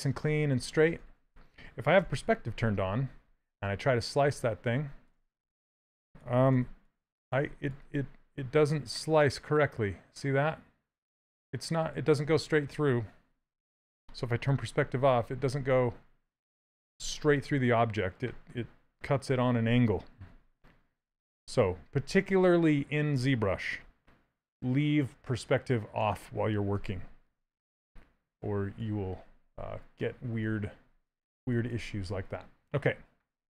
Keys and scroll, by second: 1.2 ctrl+z, 1.7 p, 5.0 shift+s, 6.7 shift+d, 13.0 p, 21.4 ctrl+z, 27.1 ctrl+w, 27.3 q.